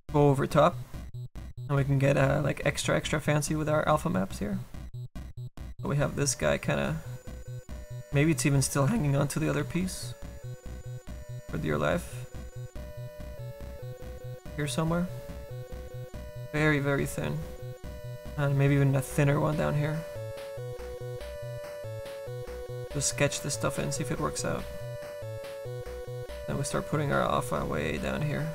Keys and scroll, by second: 8.9 ctrl+z, 9.6 ctrl+z, 10.4 ctrl+z, 10.6 ctrl+z, 10.7 ctrl+z, 25.1 s, 25.7 s.